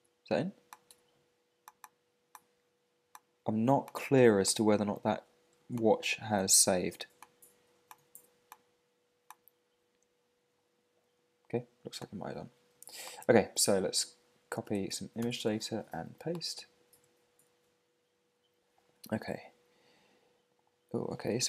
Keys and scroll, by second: 13.6 super+Tab, 15.2 super+c, 15.4 super+Tab, 16.9 super+v.